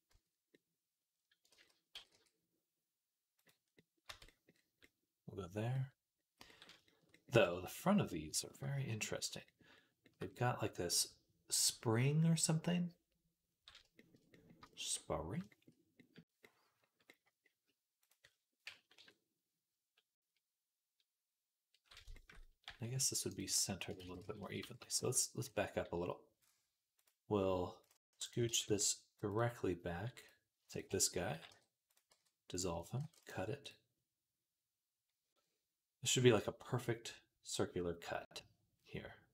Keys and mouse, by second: 1.3 ctrl+z, 1.8 g, 3.6-9.0 middle drag, 3.9 Tab, 9.4-13.3 shift+middle drag, 13.8 shift+middle click, 14.2 middle click, 14.6-17.8 shift+middle drag, 17.8 click, 17.9-21.8 middle drag, 18.8 KP_3, 22.5 g, 23.1 click, 23.4 Tab, 23.8 ctrl+z, 24.1-25.3 ctrl+z, 28.3 g, 31.1 g, 32.0 x, 32.8 ctrl+r.